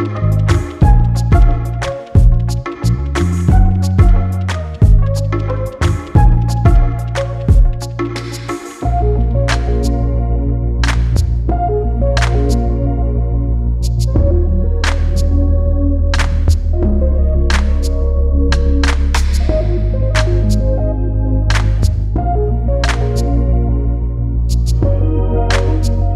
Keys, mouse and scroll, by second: 7.7 scroll down 4, 7.9-8.7 scroll up 2, 8.7 Tab, 9.0 scroll down 1, 9.3 scroll up 1, 10.0 n, 10.5 scroll down 2, 10.8-11.8 middle drag, 11.8 click, 12.3 Tab, 13.4 click, 13.7 scroll up 1, 13.8 scroll down 2, 14.0 Tab, 14.2 scroll up 1, 14.4 Tab, 14.5 right click, 15.5 Tab, 15.7 scroll up 1, 16.0-16.3 scroll down 3, 16.3 click, 17.0-17.4 scroll down 1, 17.4 g, 18.1 alt+click, 18.8 g, 19.4 click, 19.7 alt+click, 20.2 g, 20.9 alt+click, 21.5 g, 22.2 scroll down 1, 22.5 alt+click, 23.1 g, 23.7 alt+click, 24.3 g, 25.1 alt+click, 25.5 g.